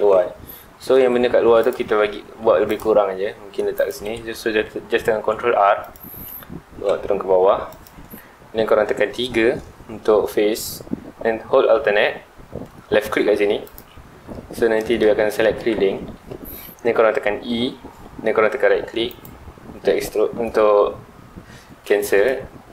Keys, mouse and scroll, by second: 0.0 Tab, 0.5 scroll up 2, 0.7-1.3 middle drag, 1.3 scroll up 2, 1.6 click, 1.8 Tab, 2.4 ctrl+r, 3.8 right click, 4.1 ctrl+z, 7.8 click, 9.2 3, 13.6 alt+click, 14.3-17.4 middle drag, 19.2 right click.